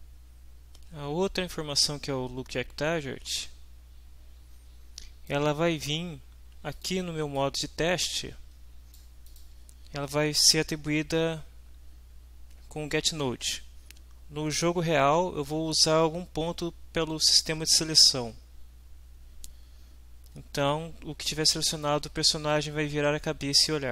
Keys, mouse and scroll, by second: 6.7 click, 7.4-9.1 drag, 9.3 click, 20.6 Up.